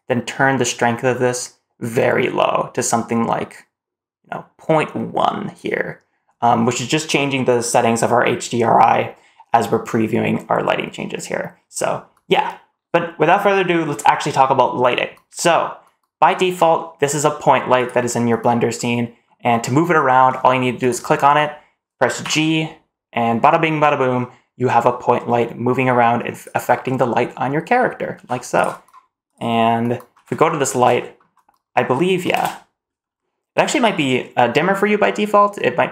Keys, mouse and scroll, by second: 17.6 click, 18.4 scroll down 1, 18.6-19.1 middle drag, 19.3-19.7 scroll down 1, 19.7 middle drag, 20.6 click, 21.2 middle click, 22.1 g, 26.6 scroll up 2, 26.8-27.1 middle drag, 27.6 middle drag, 28.0 g, 29.1 click, 30.0-30.3 scroll down 1, 30.4 shift+middle click, 30.8 middle click, 32.2 BackSpace.